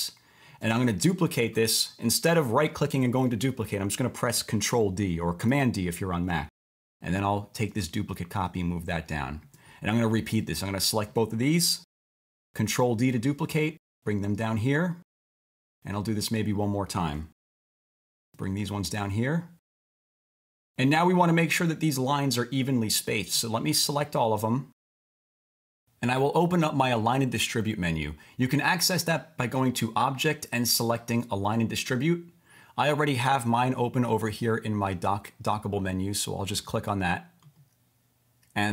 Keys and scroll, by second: 5.5 super+d, 12.1 super+d, 17.4 super+d.